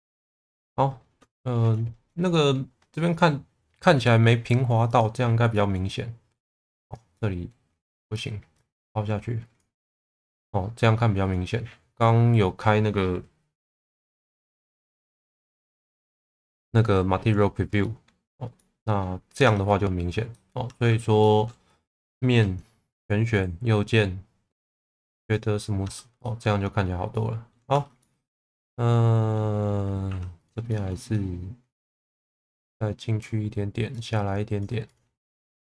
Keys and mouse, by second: 1.3 shift+middle click, 2.3 middle click, 4.9 click, 5.5 middle click, 7.1 middle click, 8.6 click, 9.8-11.5 middle drag, 17.8 middle click, 18.5 middle click, 19.4 Tab, 20.4 middle click, 20.7 Tab, 21.2 middle click, 22.1 3, 22.9 a, 25.2 right click, 25.9 Tab, 26.2 middle click, 27.1 middle click, 27.7 Tab, 28.0-29.4 middle drag, 30.1 1, 30.5 click, 30.7 shift+middle click, 31.1 middle click, 32.5 click, 34.0 click, 35.2-35.6 middle drag.